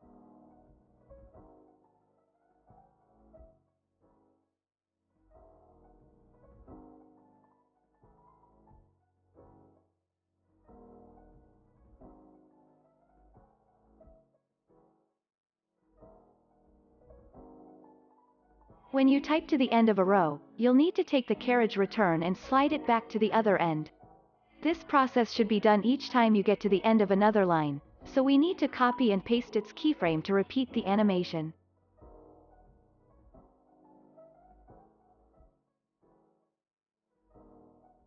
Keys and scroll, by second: 0.4 space, 5.0 space, 5.3 s, 14.5 ctrl+s, 26.0 ctrl+s, 33.9 ctrl+c, 36.1 ctrl+c.